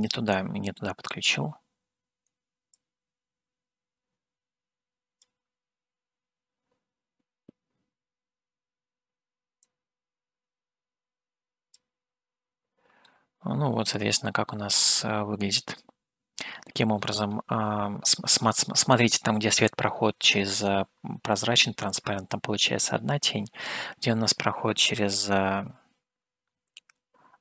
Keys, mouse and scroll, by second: 2.8-5.3 drag, 10.1-11.9 drag, 13.1-17.3 middle drag, 25.2-27.4 scroll up 1.